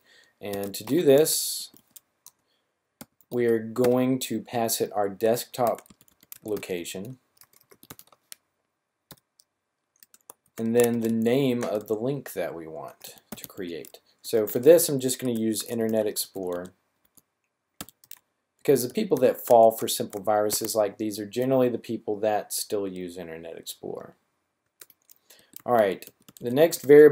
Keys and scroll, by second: 0.2-3.8 typing, 5.5-7.9 typing, 9.0 typing, 10.4-11.7 typing, 12.8-20.4 typing, 25.1-27.1 typing.